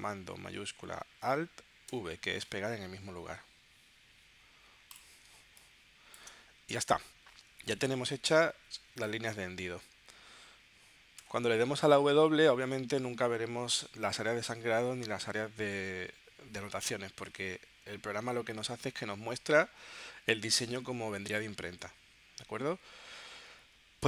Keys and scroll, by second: 1.8 alt+shift+super+v, 5.3 space, 11.2 w, 13.6 w, 17.7 w, 23.5 w.